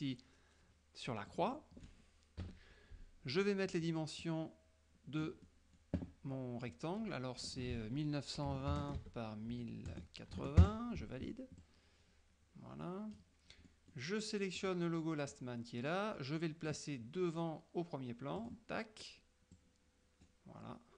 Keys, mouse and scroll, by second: 1.4 click, 2.5 KP_Subtract, 3.5 middle click, 4.3 click, 5.5 middle click, 7.6 ctrl+click, 7.8 ctrl+a, 8.5-10.4 typing, 9.1 Tab, 10.7 KP_Enter, 11.7-13.4 drag, 13.7 middle click, 13.7-14.2 scroll up 1, 14.7 click, 15.3-17.0 drag, 18.5 click, 19.6-20.9 drag.